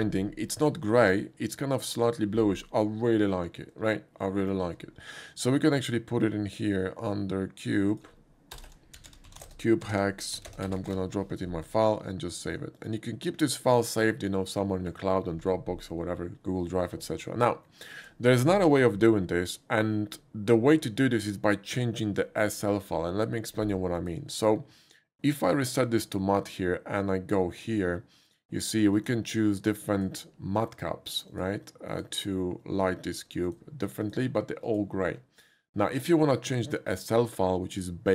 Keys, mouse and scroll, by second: 4.0 shift+middle click, 7.9 click, 8.6 Return, 8.7 Return, 8.9-10.5 typing, 10.6 Return, 10.9 ctrl+v, 12.8 click, 13.6 click, 17.7 shift+middle click, 23.9 click, 25.7 click, 28.9 click, 29.9 click, 31.3 click, 31.9 click, 33.5 click, 34.0 click, 34.7 click.